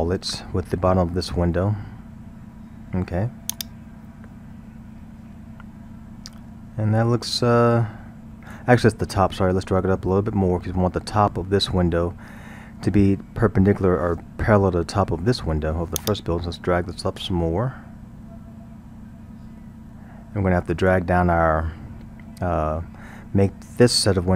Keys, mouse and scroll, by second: 3.6-6.6 drag, 16.0-19.0 drag.